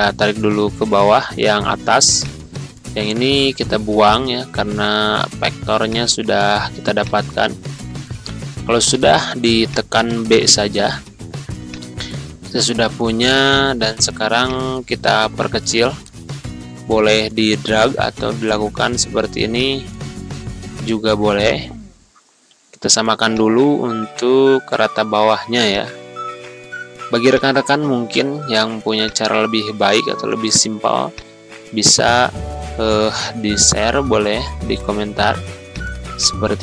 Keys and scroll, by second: 4.5 Delete, 8.2 b, 8.9 c, 15.6 2, 15.9 1, 16.4 0, 16.8 Return, 21.1 b, 33.9 p.